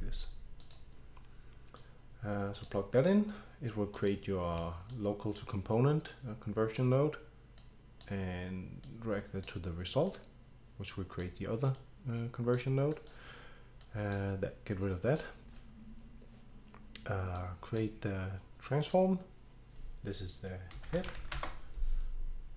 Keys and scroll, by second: 20.6-21.7 typing.